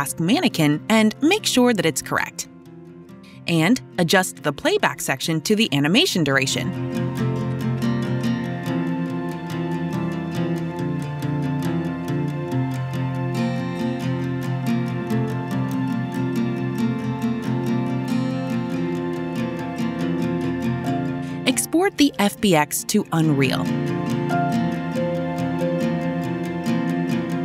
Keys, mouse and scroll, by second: 0.7-1.7 typing, 0.9 click, 0.9 scroll, 3.2 click, 5.7 alt+click, 11.0 click, 15.0 click, 16.7 click, 17.2-18.3 typing, 20.6 right click, 21.6-22.4 typing, 22.0 click, 23.6 click.